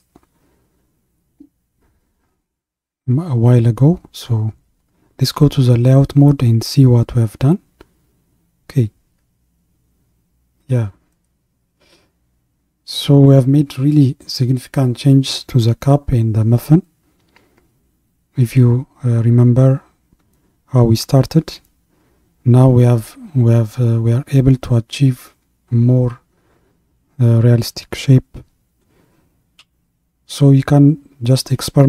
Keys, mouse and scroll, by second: 2.3-4.9 scroll down 2, 4.9 click, 5.9 click, 6.8-7.3 scroll up 1, 7.3 scroll up 1, 7.4-8.1 scroll down 1, 8.1-11.1 middle drag, 13.8-19.8 middle drag, 23.3 scroll down 2, 24.0-27.1 middle drag, 31.2-31.8 scroll up 2.